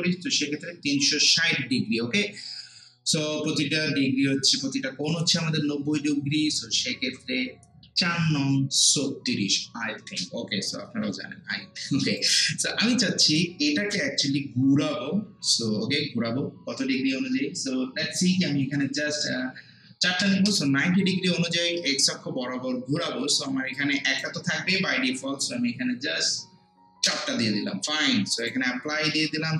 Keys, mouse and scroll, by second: 12.2-15.7 drag, 20.2 typing, 23.7-26.5 drag, 27.0 4, 28.4 click.